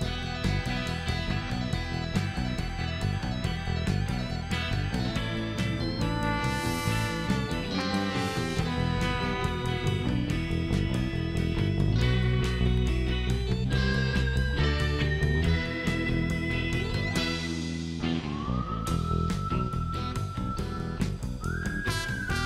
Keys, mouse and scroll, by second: 1.0 middle click, 3.0 click, 3.9 click, 4.5 click, 5.8 click, 6.7 middle click, 6.8 scroll down 2, 7.3 middle click, 8.0 middle click, 8.4 click, 9.8 click, 11.8 click, 12.0 space, 12.4 scroll down 1, 13.3 click, 13.5 space, 14.8 middle click, 15.2 click, 16.5 click, 18.0 click, 18.7 click, 19.6 middle click, 19.8 scroll down 1, 20.1 middle click, 20.5 scroll up 2, 22.2 click.